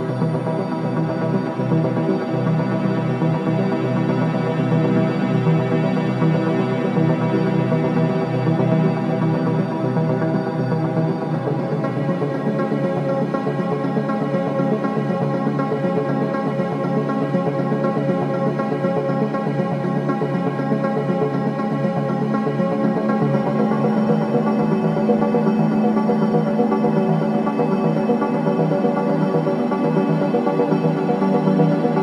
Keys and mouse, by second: 0.3 z, 1.1 click, 1.5 typing, 1.8 Tab, 2.4-7.1 alt+drag, 3.2-3.9 typing, 5.4-6.1 typing, 8.0-8.8 typing, 9.2-10.8 alt+shift+drag, 9.9-10.7 typing, 12.6-14.3 drag, 14.8-15.5 typing, 14.8-17.9 drag, 18.2 b, 18.7 click, 20.1-20.8 typing, 21.6 Escape, 22.2-23.3 drag, 23.1-24.3 typing, 26.0 click, 26.3-27.4 typing, 27.8-29.3 drag, 29.0-30.5 typing, 30.6 alt+middle click, 31.1 ctrl+alt+click, 31.5 ctrl+alt+click.